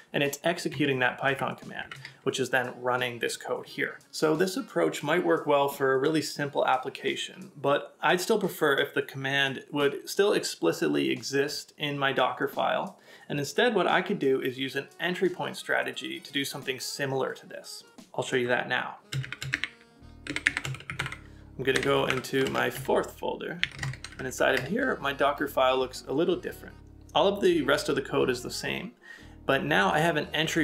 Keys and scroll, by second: 0.7 Return, 1.3 j, 1.8 j, 1.9 Return, 4.4 ctrl+a.